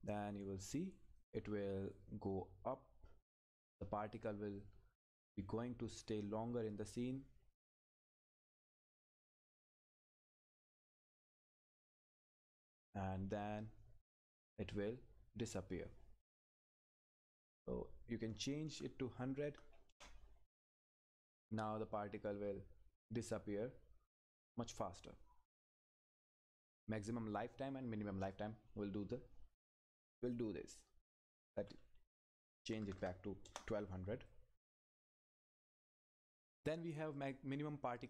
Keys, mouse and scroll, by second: 1.2-8.5 drag, 8.5 scroll down 1, 11.9 scroll up 1, 17.1 click, 19.9 Return, 21.4 click, 28.2 click, 33.4 Return.